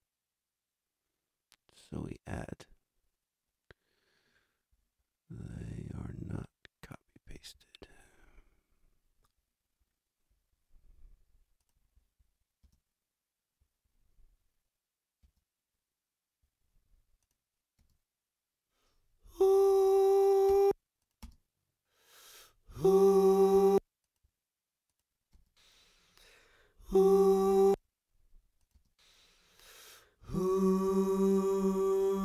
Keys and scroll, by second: 12.6 space, 15.2 space, 20.5 space, 23.5 space, 25.3 space, 27.5 space, 28.7 space.